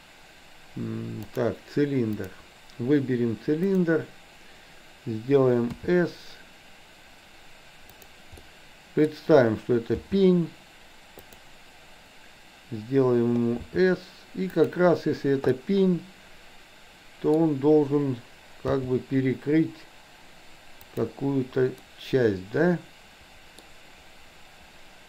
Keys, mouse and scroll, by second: 2.2 click, 5.7 s, 8.5 middle click, 10.0 g, 13.7 s, 15.6 scroll up 1, 15.7-17.4 middle drag, 18.7 g, 21.9-23.6 middle drag.